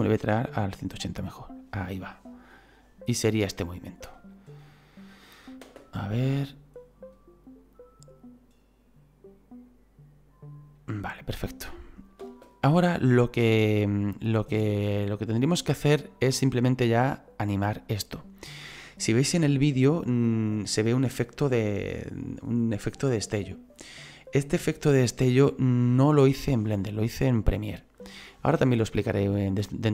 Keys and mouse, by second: 1.2 click, 4.3 right click, 12.2 space, 27.4 click.